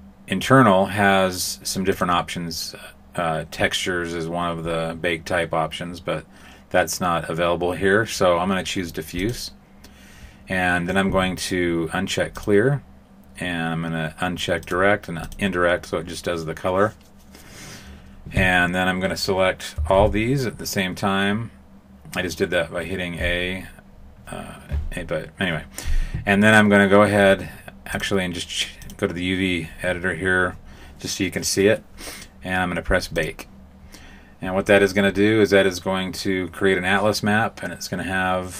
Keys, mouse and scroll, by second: 1.8 click, 12.3 click, 14.6 click, 15.2 click, 19.7 a, 19.9 a, 27.8 click, 33.1 click.